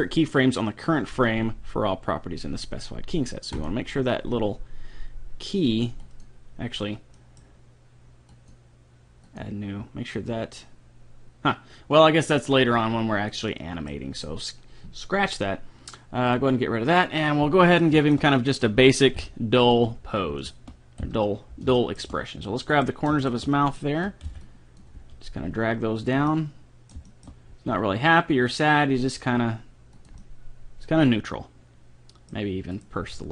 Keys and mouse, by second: 3.5-5.3 drag, 6.0-7.6 drag, 7.2-8.6 middle drag, 8.4-10.0 drag, 10.2-11.9 drag, 13.5 middle click, 14.0 middle click, 16.3-18.0 drag, 17.0-18.0 right drag, 18.0-19.2 middle drag, 19.2 KP_3, 21.0 KP_5, 22.8-25.4 right drag, 24.2 b, 25.0 g, 26.3-27.8 middle drag, 27.5 g, 30.2-32.0 middle drag, 32.7-33.3 right drag, 33.0 g.